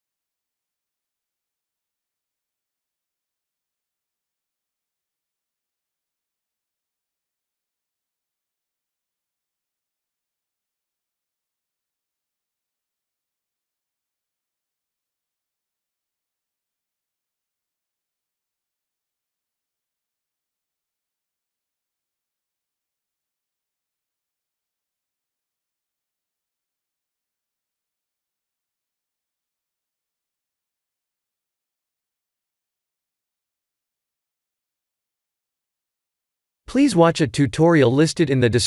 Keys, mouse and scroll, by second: 0.0 click, 0.9 click, 2.1 click, 3.3-4.5 scroll down 4, 4.5-5.1 scroll down 1, 5.1 scroll up 1, 5.3 click, 8.5 click, 10.0 click, 10.4 click, 11.3 shift+middle click, 11.5 shift+middle click, 11.9 click, 12.7 shift+click, 12.8 shift+click, 14.1 click, 18.7 click, 20.7 a, 21.2 Tab, 21.8 click, 22.1 Tab, 22.4 click, 23.1 click, 23.9 Tab, 24.5 a, 26.4 click, 26.9 Tab, 27.7 click, 28.4 middle click, 31.0 shift+middle click, 31.6 middle click, 32.1 middle click, 32.4 shift+middle click, 32.8 ctrl+alt+KP_0, 33.4 shift+`.